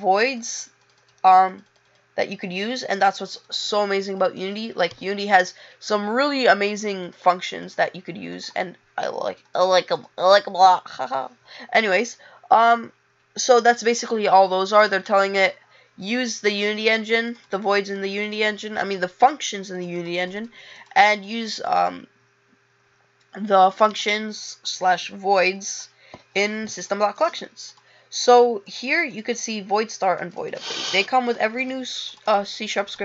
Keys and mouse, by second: 7.1 click, 7.6 click, 8.3 click, 9.5 click, 9.9 click, 31.4 click, 31.6 click, 32.2 click.